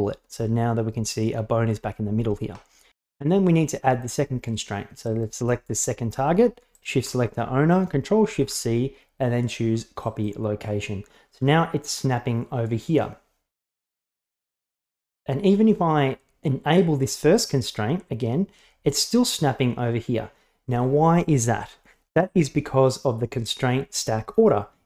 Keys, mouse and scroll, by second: 5.1 right click, 6.8 shift+right click, 8.3 ctrl+shift+c, 17.4 click.